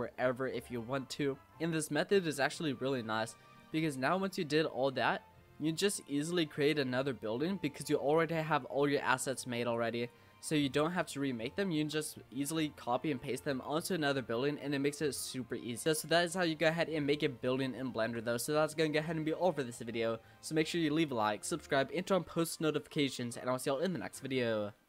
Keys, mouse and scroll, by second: 0.0 scroll up 1, 0.2-2.2 middle drag, 2.2 scroll down 1, 2.3-3.0 middle drag, 3.0 scroll up 2, 3.3-6.7 middle drag, 6.7-7.2 scroll down 1, 7.2 shift+middle click, 8.1 click, 9.3 click, 9.7 click, 10.5 click, 11.5-12.2 shift+middle drag, 12.2-15.2 scroll down 2, 15.9 click, 16.3-16.8 middle drag, 16.8-17.4 scroll up 3, 17.4-20.6 shift+middle drag.